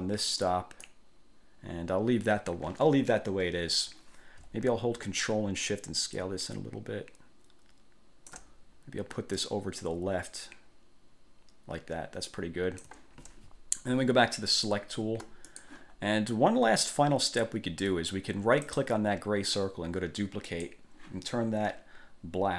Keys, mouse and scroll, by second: 0.5 click, 5.8 ctrl+shift+click, 9.6-13.2 ctrl+drag, 15.7 click, 16.1 scroll down 2, 16.7-17.0 scroll up 2, 17.0-17.3 scroll down 2, 17.9 scroll up 2, 18.9 click, 20.7 click.